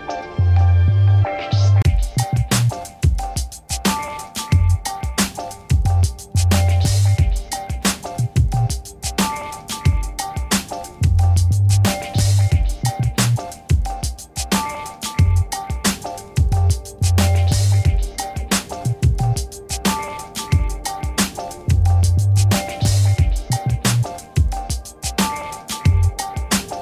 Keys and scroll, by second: 21.0 ctrl+-, 25.5 ctrl+h.